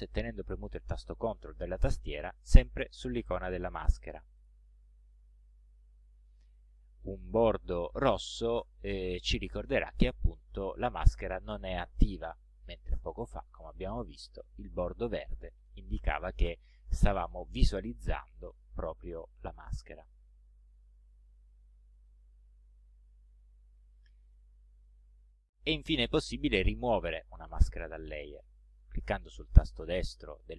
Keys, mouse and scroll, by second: 2.2 ctrl+click, 3.1 ctrl+click, 4.0 ctrl+alt+click, 4.5 ctrl+alt+click, 13.9 alt+click, 20.8 alt+click, 22.1 ctrl+click, 23.2 ctrl+scroll down 2, 23.7 ctrl+scroll up 2, 24.4 ctrl+click.